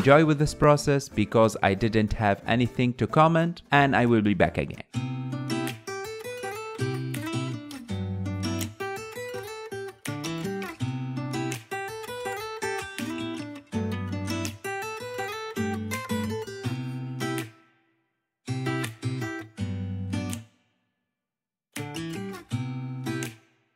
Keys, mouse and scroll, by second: 0.2-1.2 drag, 1.2 f, 2.3-6.1 drag, 6.1 scroll down 4, 6.3 middle click, 6.4 middle click, 6.8 KP_3, 7.0 scroll down 1, 7.1 scroll up 3, 7.4 click, 8.0 alt+z, 8.1 scroll down 9, 8.3 middle click, 8.5 KP_1, 8.7 KP_3, 8.9 ctrl+Tab, 9.2 click, 9.5 scroll down 11, 9.7 shift+middle click, 9.8 click, 10.0 shift+d, 10.1 scroll up 6, 10.2 shift+middle click, 10.3 s, 10.5 g, 10.8 shift+middle click, 11.0 ctrl+Tab, 11.3-11.6 scroll down 2, 11.6 scroll up 1, 11.7 click, 12.1 alt+z, 12.1 click, 12.4 f, 12.6 click, 13.3 alt+z, 13.4-14.4 drag, 14.4 middle click, 14.9 KP_1, 15.1-15.5 scroll up 7, 15.2 shift+middle click, 15.6 f, 15.7-17.0 drag, 16.9 f, 17.1-19.1 drag, 19.1 middle click, 19.3 scroll up 2, 19.3 middle click, 19.6 scroll down 3, 19.7 middle click, 20.1 ctrl+Tab, 20.2 click, 20.3 ctrl+Tab, 20.6 ctrl+Tab, 20.6 click, 21.3 ctrl+Tab, 21.3 ctrl+s, 21.6 alt+z, 21.7-22.0 scroll down 4, 22.0 click, 22.1 scroll up 2.